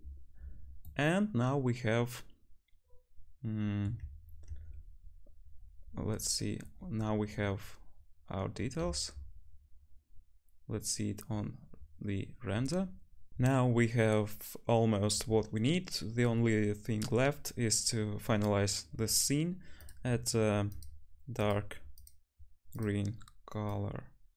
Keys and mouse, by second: 9.3 z, 9.8-11.9 middle drag, 12.8 middle click, 20.8 click, 21.5-23.0 drag.